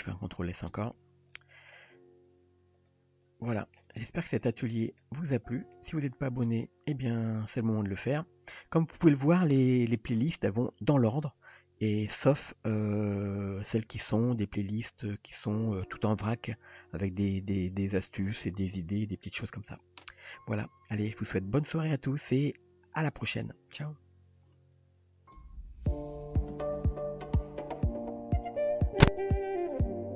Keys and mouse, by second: 0.1 ctrl+s, 1.6 middle click, 2.8 drag, 3.6 shift+middle click, 5.0-5.7 middle drag.